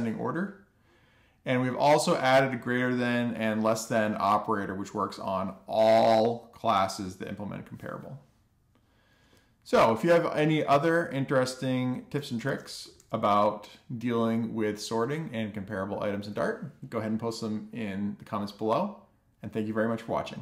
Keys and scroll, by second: 10.4 alt+shift+f, 10.9 super+s.